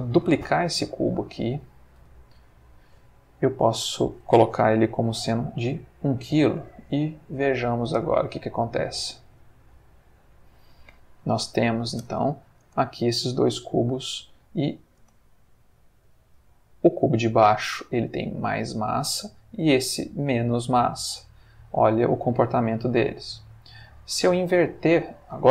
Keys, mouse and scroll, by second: 0.4 shift+d, 1.4 click, 2.0 r, 2.7 click, 3.6 click, 5.1 1, 5.6 Return, 7.8 space, 10.0-10.8 middle drag, 12.0 Escape, 14.6 Escape, 15.1 space, 16.5 Escape, 18.0 middle click, 18.7 click, 19.8 click, 20.3-20.9 middle drag, 21.1 space, 23.5 Escape, 25.1 click.